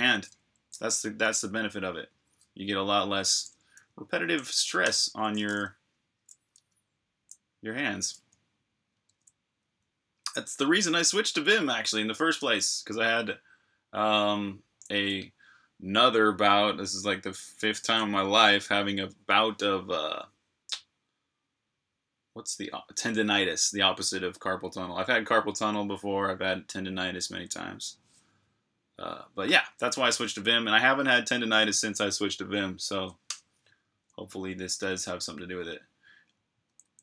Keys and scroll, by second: 4.8 super+h, 6.5 super+Tab, 34.8 j.